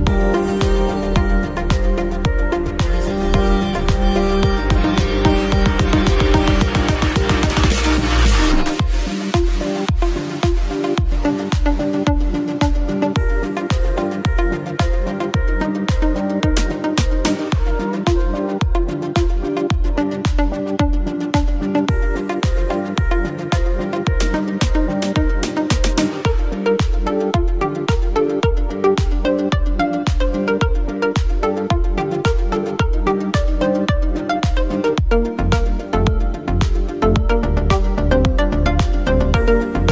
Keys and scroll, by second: 2.5 Up, 3.1 Down, 3.3 Left, 13.1 shift+space.